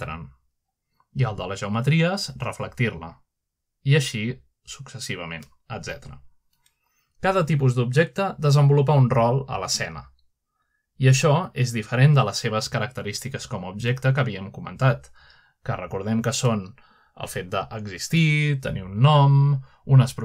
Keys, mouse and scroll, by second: 3.9 click, 4.9 click, 5.7 click, 6.4 click, 7.4 click, 8.5 click, 9.9 click, 13.7 click, 14.1-15.6 drag, 17.7 click, 18.3 click.